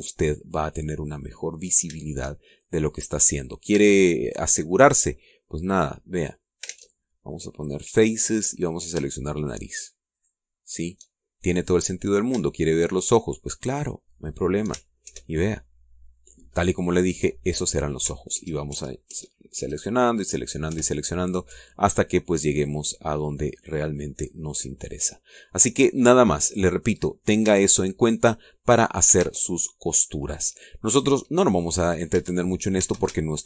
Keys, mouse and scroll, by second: 1.2-1.5 scroll down 2, 2.2 scroll up 2, 4.7 a, 7.1 click, 7.6 ctrl+Tab, 8.5 click, 9.6 shift+right click, 10.3 shift+right click, 11.1 shift+right click, 11.6 shift+right click, 12.6 right click, 13.8 shift+right click, 14.7 shift+right click, 16.0 ctrl+shift+KP_Add, 19.3 ctrl+KP_Add, 21.6 ctrl+KP_Add, 23.4 scroll down 1, 23.8-25.1 middle drag, 25.1 scroll down 1, 25.4-26.6 middle drag, 26.7-27.2 scroll down 1, 27.2-27.6 scroll up 1, 27.9 scroll up 1, 28.4 a, 28.8 scroll down 1, 29.2 middle click, 31.9 click, 32.3 middle click, 33.1 a.